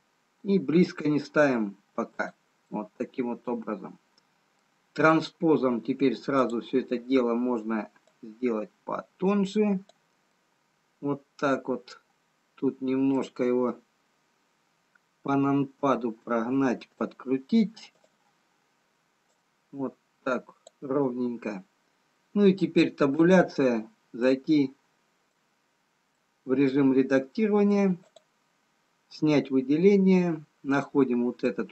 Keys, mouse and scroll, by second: 3.2 middle click, 6.9 click, 8.2 click, 11.4 middle click, 15.6 KP_7, 18.1 click, 19.5 click, 23.2 Tab, 24.3 middle click, 28.6 middle click, 28.6 click, 28.6 scroll down 3, 30.1-31.0 scroll up 1, 31.0 middle click.